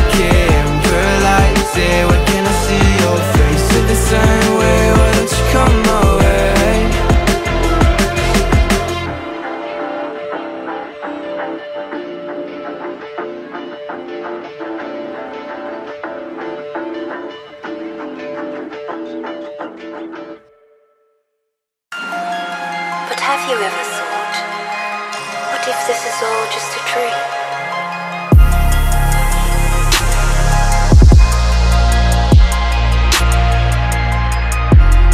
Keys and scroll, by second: 1.7 t, 2.1 shift+a, 2.4 l, 2.5 Escape, 7.5 Up, 11.3 ctrl+g, 11.7 Up, 16.7 space, 23.4-24.9 typing, 25.2 Escape, 26.5-27.6 typing, 27.9 Escape, 29.5 shift+k, 29.5 i, 29.7 d, 29.8 s, 30.0 Escape.